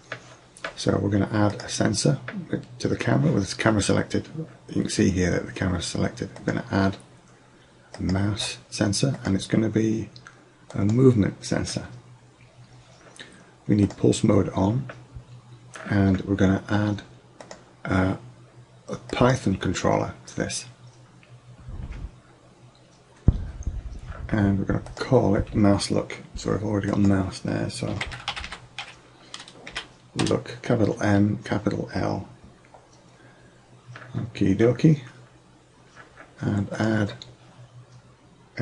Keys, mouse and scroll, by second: 2.6 click, 6.4-8.3 drag, 9.2-11.1 drag, 13.9-15.8 drag, 17.5-19.4 drag, 25.0-26.8 drag, 28.5 o, 36.8-38.6 drag.